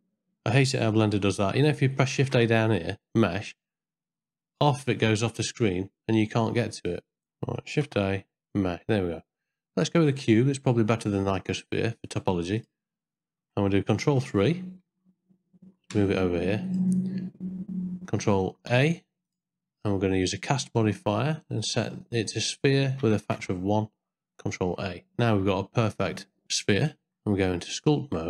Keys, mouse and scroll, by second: 2.2 shift+a, 7.8 shift+a, 14.2 ctrl+3, 15.9 g, 18.7 ctrl+a, 19.3-20.3 drag, 22.4 click, 24.6 ctrl+a, 25.6 middle click, 28.1 Tab.